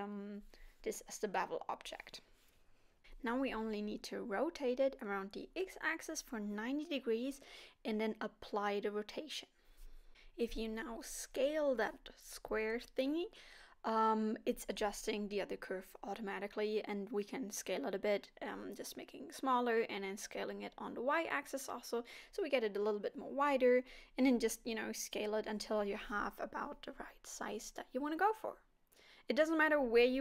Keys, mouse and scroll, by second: 1.2 click, 2.6 middle click, 4.1 r, 7.1 scroll down 2, 8.0 ctrl+a, 10.5 scroll down 3, 10.8 middle click, 14.3 s, 17.9 middle click, 19.2 s, 23.8 s, 26.4 s, 28.0 middle click, 29.8 KP_7.